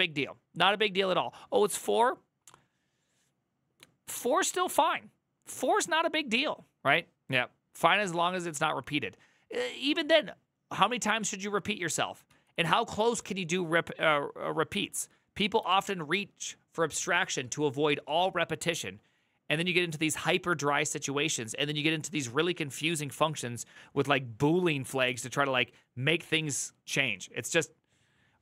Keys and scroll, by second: 12.0 alt+[, 15.4 alt++.